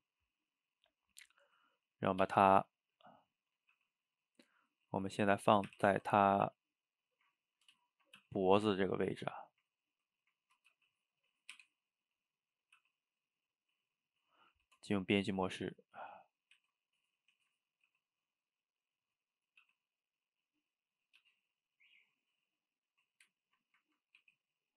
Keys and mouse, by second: 2.2 g, 2.9-3.8 middle drag, 3.8 g, 4.7-5.7 middle drag, 5.7 r, 6.8-8.2 middle drag, 8.2 g, 9.1-10.7 middle drag, 10.7 g, 11.6 r, 12.8 g, 13.4-14.6 middle drag, 14.6 Tab, 16.2 drag, 16.6 shift+z, 16.9 middle click, 17.4 shift+z, 17.6-17.9 middle drag, 17.9 g, 19.5 drag, 19.6 g, 21.0 drag, 21.2 g, 22.0-23.1 middle drag, 23.1 drag, 23.7-24.3 middle drag, 24.3 r.